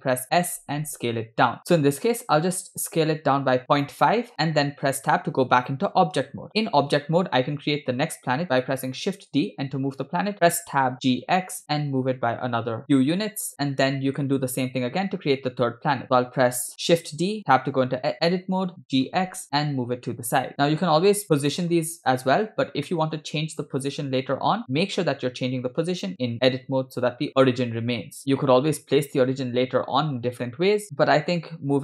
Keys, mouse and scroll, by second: 0.3 s, 4.3 shift+middle click, 5.1 Tab, 9.0 shift+d, 10.4 Tab, 11.0 g, 13.9 shift+middle click, 16.0 Tab, 17.0 shift+d, 18.9 g, 20.6 click, 21.3 Tab, 21.5 drag, 23.0-23.3 shift+middle drag, 25.3 Tab, 28.4 g, 29.7 Tab, 30.9 Tab, 30.9 click, 30.9 a, 31.4 g.